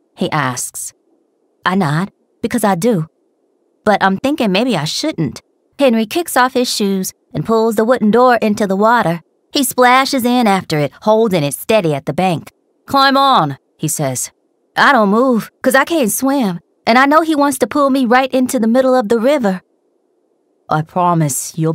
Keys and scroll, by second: 2.1 r, 3.1 ctrl+s, 3.8 r.